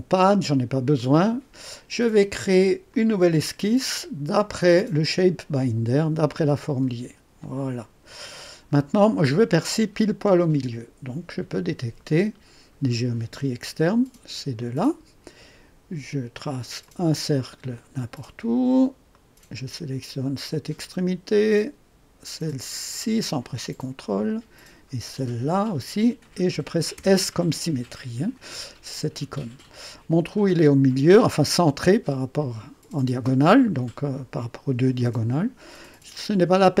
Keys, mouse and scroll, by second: 0.9 click, 2.8 click, 4.3 click, 5.5 click, 6.6-7.1 scroll up 2, 7.4 right click, 8.4-8.8 scroll up 1, 8.8 right click, 11.4 click, 12.8 click, 14.5 click, 16.8 click, 17.7 click, 18.6 click, 19.1 right click, 20.7 click, 22.8 click, 24.5 click, 26.9 s.